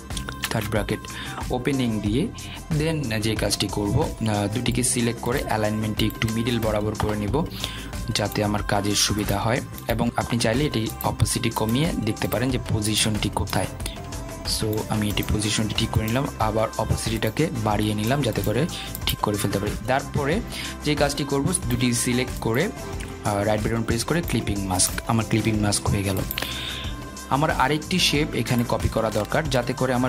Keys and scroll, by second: 1.7 ctrl+shift+[.